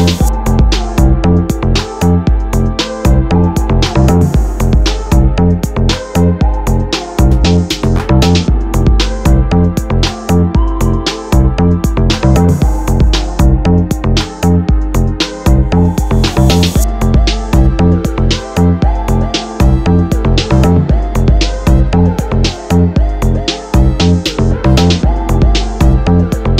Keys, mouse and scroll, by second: 1.0-2.3 middle drag, 2.3 KP_7, 3.6 shift+d, 6.8 r, 9.8 g, 11.6 click, 12.1-13.8 middle drag, 13.8-14.3 scroll down 1, 14.3-15.8 middle drag, 15.8 click, 17.9 click, 18.8 KP_7, 20.4 g, 22.6 click, 22.8 g, 23.9 click, 24.3-25.4 middle drag, 25.4 shift+a.